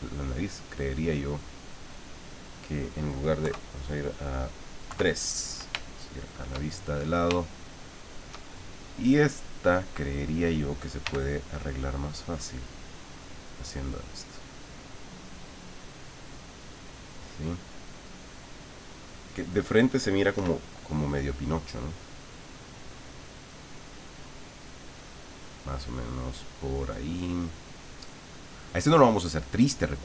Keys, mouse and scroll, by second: 0.6 middle click, 1.2-2.3 middle drag, 3.4 KP_3, 4.9 KP_3, 5.8 shift+middle click, 7.9 shift+middle click, 8.9 click, 9.8 click, 11.0 f, 12.1 click, 13.1-16.5 drag, 16.8-19.0 middle drag, 20.3 KP_1, 22.4-23.9 drag, 24.1-25.2 drag, 25.8 click, 26.3 click, 26.7 click, 27.9 click, 29.7 click.